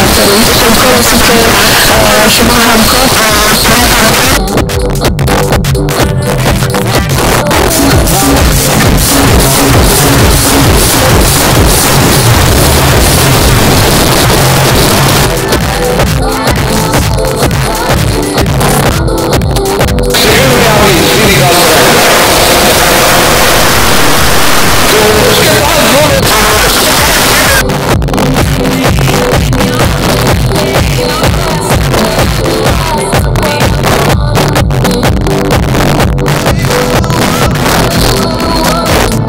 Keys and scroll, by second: 3.1 Page_Down, 13.9 Page_Down, 26.2 Page_Down.